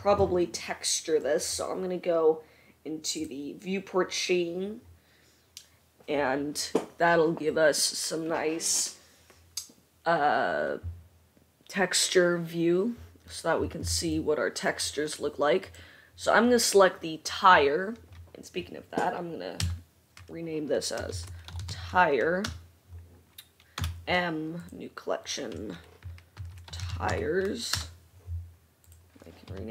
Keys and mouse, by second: 0.5-29.7 drag, 15.8 middle click, 15.8 right click, 19.7 F2, 23.9 m.